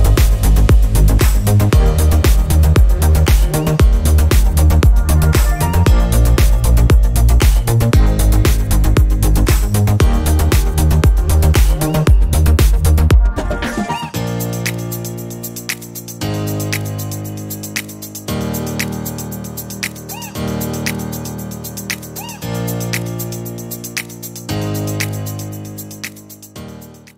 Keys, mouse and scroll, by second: 0.2 click, 2.2 ctrl+d, 3.3-4.9 ctrl+drag, 6.0 click, 7.0 ctrl+z, 7.5 ctrl+click, 8.0 ctrl+click, 9.0 ctrl+click, 11.3 ctrl+d, 11.7-13.3 ctrl+drag, 20.7 click, 22.6 click, 23.8 click.